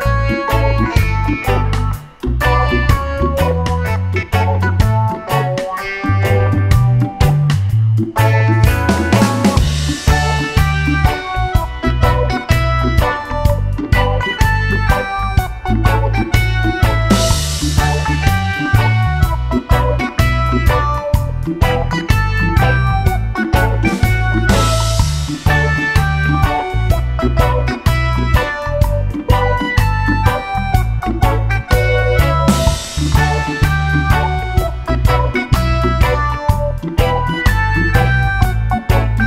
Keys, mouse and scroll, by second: 3.1 click, 4.6 click, 6.1 click, 7.9 click, 9.3 click, 11.6 click, 13.9 click, 15.5-16.6 drag, 19.0 click, 21.0 click, 28.9 click, 31.3 click, 33.1-34.7 drag, 36.0-37.6 drag, 38.8 click.